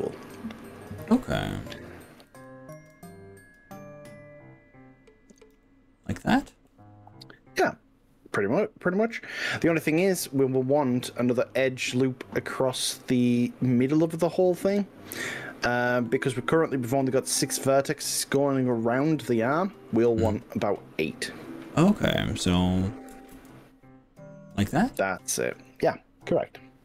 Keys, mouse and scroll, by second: 2.4 click, 2.8 e, 5.4 click, 6.0 scroll down 2, 6.8-10.4 middle drag, 11.0-12.8 middle drag, 13.8-16.0 middle drag, 17.4 scroll up 1, 17.9-19.0 middle drag, 19.2-20.0 shift+middle drag, 20.3-21.8 middle drag.